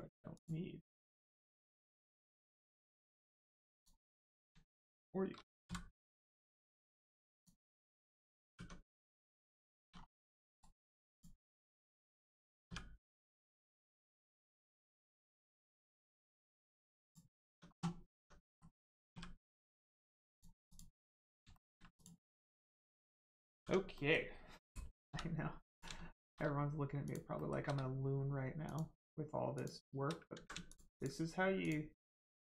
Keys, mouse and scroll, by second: 1.1 middle click, 3.7 click, 4.8 shift+click, 7.3 click, 8.5 Tab, 8.9 middle click, 9.6 shift+middle click, 9.9-10.5 scroll down 1, 10.5 right click, 11.1 click, 12.6 q, 14.5 click, 17.0 click, 17.3 scroll down 1, 17.4 Tab, 18.4 middle click, 19.1 q, 20.3 click, 21.1 middle click, 21.5 shift+middle click, 21.9 click, 22.4 middle click, 22.8-23.6 scroll up 1, 23.6 Tab, 23.9 middle click, 25.0 3, 25.6 click, 27.0 shift+click, 27.3 shift+middle click, 28.6 shift+click, 30.2 ctrl+click, 30.3 ctrl+z, 30.6 shift+click, 30.9 shift+click, 31.5 shift+click.